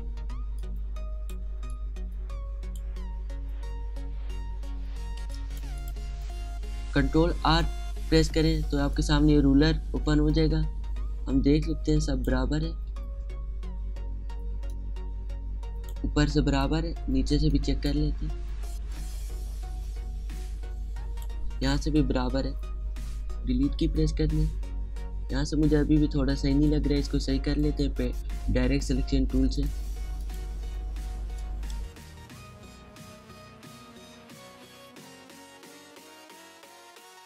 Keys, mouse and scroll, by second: 0.5-3.2 alt+shift+drag, 3.2 alt+scroll up 1, 3.3-3.9 alt+scroll down 1, 3.9-4.5 alt+scroll up 1, 5.2 space, 5.3 click, 8.0 ctrl+r, 8.9-13.0 drag, 13.0 space, 14.6-17.4 drag, 17.4 space, 17.5 click, 17.8 space, 18.9-21.6 drag, 24.2 click, 24.3-24.8 alt+scroll down 1, 24.8-25.3 alt+scroll up 1, 26.2 space, 26.3 click, 27.5 right click, 29.5 click, 32.0 ctrl+z, 32.3-35.5 drag, 35.6 click.